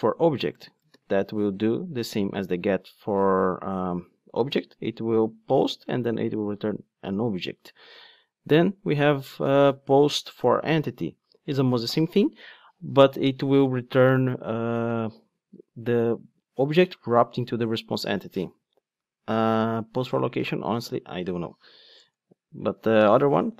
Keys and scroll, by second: 0.9 ctrl+space, 1.7 Return.